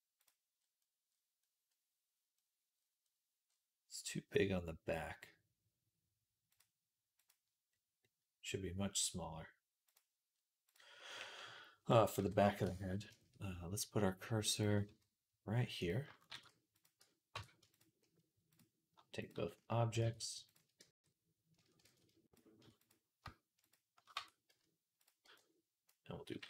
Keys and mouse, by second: 0.0 click, 0.1-6.3 middle drag, 6.3 click, 6.4 middle click, 7.5-9.7 middle drag, 9.7 click, 9.8-12.0 middle drag, 12.0 KP_3, 12.5 Tab, 12.9-14.4 shift+middle drag, 14.4-15.7 drag, 14.7 z, 15.7 middle click, 16.1 shift+s, 16.2 middle click, 17.2 Tab, 17.9 shift+click, 18.0 middle click, 19.0 shift+click, 19.9 ctrl+z, 20.3 shift+click, 20.6 Tab, 21.7 ctrl+z, 22.1 shift+click, 23.5 shift+click, 24.0 Tab, 24.3 z, 25.1 b.